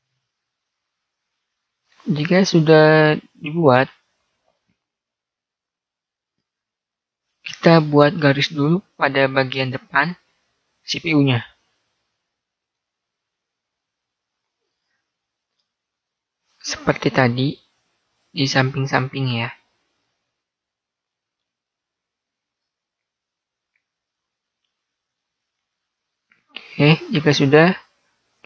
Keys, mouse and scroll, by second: 5.2-8.0 middle drag, 11.2-13.2 middle drag, 13.2 ctrl+r, 20.0-21.8 middle drag, 21.8 ctrl+r.